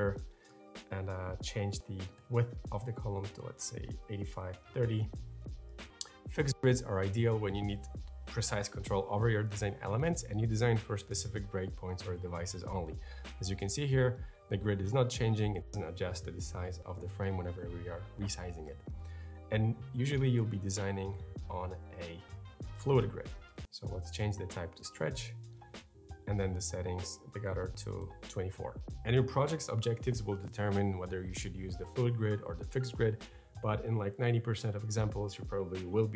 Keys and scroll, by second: 1.3 8, 1.7 5, 2.0 Return, 3.6-4.5 typing, 18.9 super+z, 27.6 2, 27.6 Return.